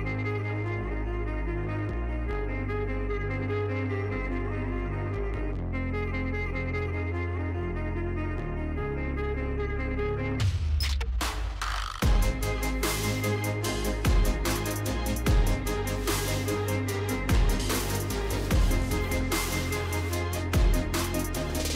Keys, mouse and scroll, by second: 0.5-1.3 typing, 1.9 Return, 3.2 space, 4.2-5.5 typing, 5.7 click, 8.0 shift+click, 8.2 space, 8.9 space, 9.8 click, 12.0 click, 12.2-13.5 typing, 14.5 click, 14.7 click, 18.2 click, 19.1-21.7 typing, 20.7 Tab.